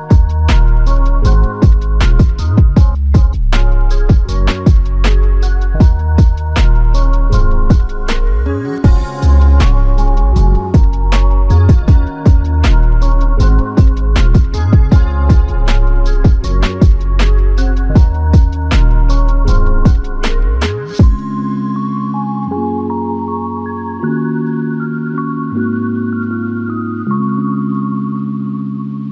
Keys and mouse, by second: 1.7 alt+click, 6.2 shift+click, 10.7 g, 11.3 alt+click, 13.0 f, 14.9 double click, 17.4 alt+click, 21.2 ctrl+click.